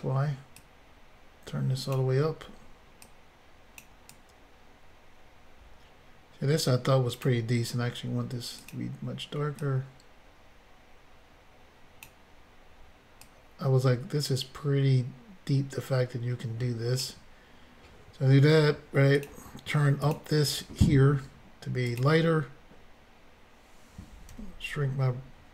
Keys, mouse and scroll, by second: 3.0 click, 4.1 click, 8.7 click, 9.6 click, 13.2 click, 19.2 click, 19.3 click, 20.0 click, 20.1 click, 21.9 click, 24.3 f.